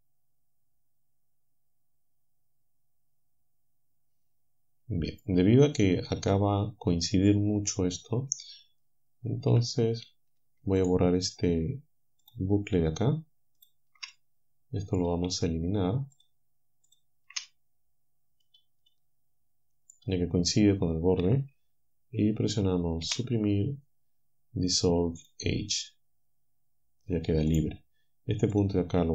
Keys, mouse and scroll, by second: 9.6 a, 12.3 alt+shift+click, 13.6 alt+shift+click, 14.1-16.4 drag, 16.9 alt+shift+click, 17.4-18.6 drag, 18.9-20.1 drag, 23.1 Delete, 25.2 click, 27.6 click, 28.6 click.